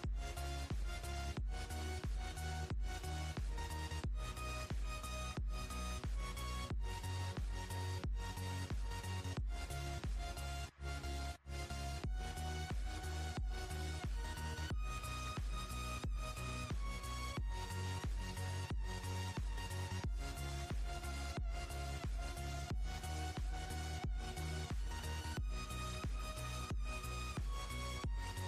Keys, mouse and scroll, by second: 0.0 click, 0.3 Tab, 0.8-1.3 scroll up 1, 1.4-2.3 scroll down 1, 2.3 click, 3.5 click, 4.5-6.4 drag, 7.9 click, 8.6 click, 9.8 click, 10.2 click, 10.7 Tab, 12.0 click, 13.9 alt+click, 14.7 alt+click, 16.4 alt+shift+click, 18.7 ctrl+b, 21.5 Tab, 22.5 scroll down 1, 24.1 click, 26.6 ctrl+z, 28.3 KP_1.